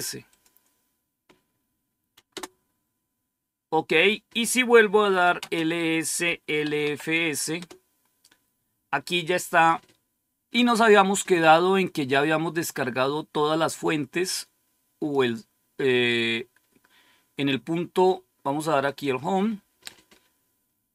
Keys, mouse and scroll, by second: 0.2 click, 0.9 click, 2.2 Return, 4.8-7.5 typing, 12.5-15.7 drag, 18.7 click, 19.5 click.